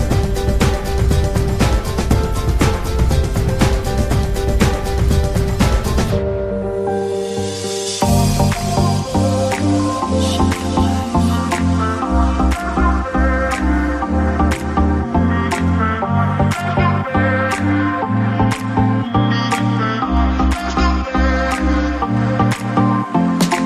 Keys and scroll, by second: 8.5 BackSpace, 17.0 BackSpace, 18.5 BackSpace, 21.2 BackSpace.